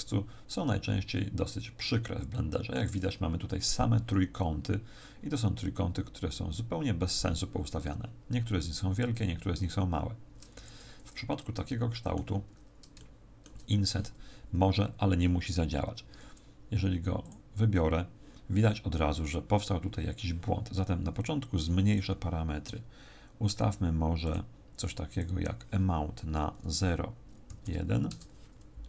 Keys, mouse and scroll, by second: 0.0 Tab, 0.4-1.8 scroll up 3, 2.3 shift+middle click, 10.6 a, 11.6 middle click, 12.4-13.0 scroll down 5, 13.0 shift+middle click, 17.2 click, 21.8 click, 25.0 click.